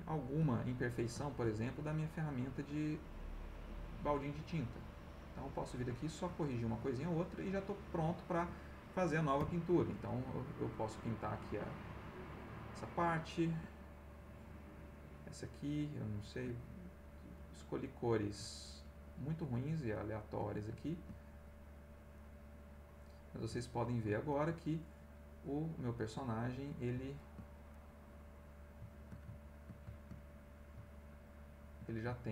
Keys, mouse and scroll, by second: 0.3 ctrl+z, 0.8-1.8 ctrl+middle drag, 2.1 ctrl+middle click, 3.0 click, 3.8 middle click, 4.7-6.0 drag, 5.6-6.7 ctrl+middle drag, 6.8-9.0 ctrl+middle drag, 9.4 f, 10.0 ctrl+click, 10.7 ctrl+click, 11.5 click, 12.3 middle click, 13.4 ctrl+click, 14.2 click, 16.2 ctrl+click, 16.9 click, 17.3 click, 19.3 ctrl+z, 19.9 ctrl+click, 20.8 ctrl+click, 21.4 ctrl+click, 22.1 click, 24.3 ctrl+click, 25.3 click, 26.1 click, 27.1 ctrl+click, 27.7 ctrl+click, 32.2 ctrl+click.